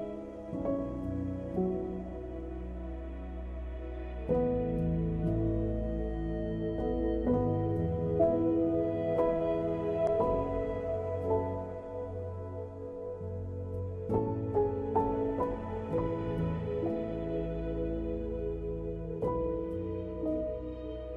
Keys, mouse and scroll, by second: 0.4 click, 1.0 Tab, 1.2 scroll up 2, 1.4 middle click, 2.2-2.6 scroll up 1, 2.6 click, 3.1 click, 3.4 middle click, 4.4 shift+click, 4.6 middle click, 4.9 x, 5.4 middle click, 6.6 click, 6.9 middle click, 7.6 alt+click, 8.9 shift+click, 9.5 shift+click, 10.7 alt+shift+click, 11.2 s, 13.0 middle click, 13.8 ctrl+r, 14.6 middle click, 16.2 alt+click, 17.0 e, 17.4 s, 18.0 e, 18.9 middle click, 19.3 click, 19.9 middle click.